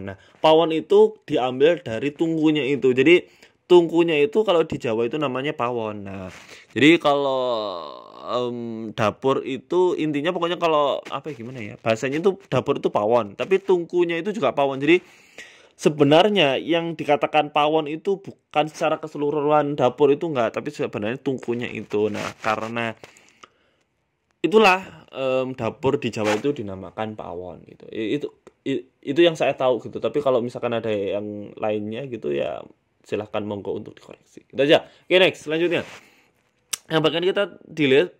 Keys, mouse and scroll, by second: 0.7 g, 3.1 middle click, 3.6 shift+middle click, 3.8 middle click, 4.2 shift+middle click, 4.5 middle click, 5.1 s, 6.4 middle click, 6.7 scroll up 1, 6.9 shift+middle click, 7.1 scroll down 4, 7.1 scroll up 1, 7.3 middle click, 8.9 Tab, 9.1 click, 10.0 g, 11.0 Tab, 11.1 middle click, 12.1 scroll up 2, 12.5 middle click, 13.1 middle click, 14.0 middle click, 14.6 Tab, 14.7 middle click, 15.0 scroll up 1, 15.1 scroll down 2, 15.8-16.1 scroll up 5, 16.8 scroll up 1, 18.6 click, 19.9 click, 20.6 middle click, 20.9 scroll down 2, 21.1 shift+middle click, 21.7 KP_1, 22.4 ctrl+r, 24.3 s, 27.1 s, 28.0 click, 28.8 s, 31.3 ctrl+r, 33.2 middle click, 33.4 Tab, 33.8 Tab, 34.1 middle click, 35.0 click, 35.8 right click, 36.2 shift+right click, 37.3 Delete.